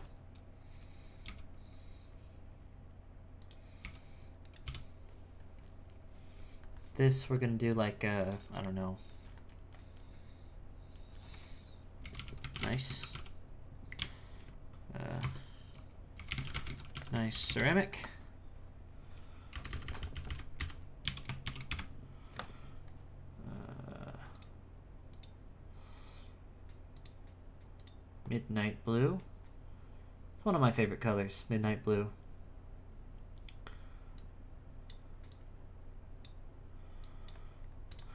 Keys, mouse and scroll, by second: 1.2 h, 3.4 click, 3.8 h, 4.4 right click, 4.6 l, 8.2-11.3 drag, 19.7 Left, 19.8 Left, 20.2 Left, 24.3 click, 25.1 click, 34.1-38.0 drag.